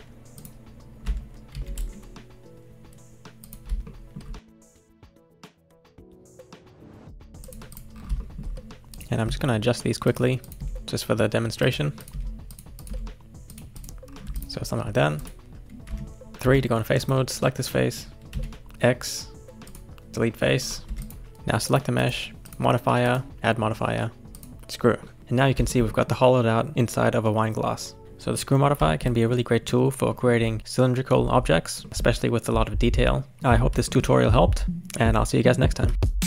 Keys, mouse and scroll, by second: 0.4 click, 1.5 ctrl+shift+b, 3.8 shift+middle click, 4.5 click, 4.9 ctrl+shift+b, 5.4 shift+middle click, 5.5 scroll up 1, 5.6 click, 6.0 ctrl+shift+b, 6.4 shift+middle click, 6.6 click, 6.9 ctrl+shift+b, 7.7 click, 7.9 scroll down 4, 8.2 shift+middle click, 8.5-8.8 scroll up 3, 8.8 shift+middle click, 8.9 click, 9.3 g, 10.4 click, 10.6 g, 12.0 click, 12.1 g, 12.8 click, 12.9 g, 13.7 click, 14.1 scroll down 1, 14.3 Tab, 14.4 click, 14.7-15.2 scroll down 2, 15.2 click, 15.9 Tab, 16.3 scroll up 1, 16.4 3, 17.0 click, 18.3 x, 20.6-20.9 scroll down 4, 20.9 Tab, 21.0 click, 21.7 click, 22.0 click, 22.4 click, 23.0-25.0 drag, 25.0 middle click, 25.3-25.7 scroll up 1, 25.7-35.4 shift+middle drag, 35.4-35.9 scroll up 1, 35.9 scroll down 1.